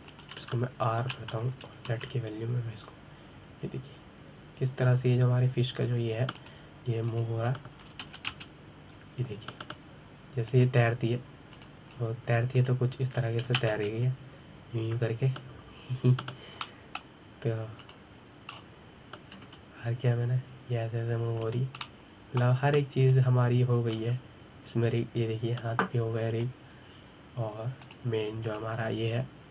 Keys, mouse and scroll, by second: 0.7 g, 2.8 r, 8.9 click, 9.8 r, 13.3 click, 13.7-14.4 scroll down 2, 14.4 click, 15.3 r, 18.4-19.6 middle drag, 19.6 click, 20.3-21.3 scroll up 3, 21.3 r, 23.7-24.8 middle drag, 24.8 click, 25.8 r.